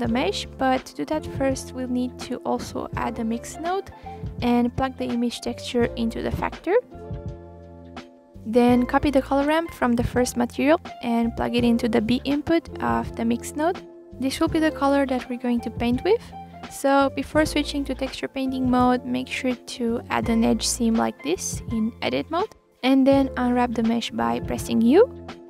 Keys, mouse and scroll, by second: 0.1-4.5 drag, 5.0 click, 5.4-5.8 scroll up 2, 5.8 shift+a, 7.6-8.0 drag, 8.2 scroll down 3, 10.3 click, 10.7 click, 11.6 click, 12.5 ctrl+c, 13.6 ctrl+v, 14.1 click, 14.9-15.3 drag, 15.5 click, 16.5 click, 17.9 ctrl+z, 18.3 click, 19.3 click, 20.0 middle click, 20.4 scroll up 1, 20.5 middle click, 21.2-22.2 alt+drag, 22.2-22.9 scroll down 2, 22.9-24.1 drag, 24.1 a, 24.4 u.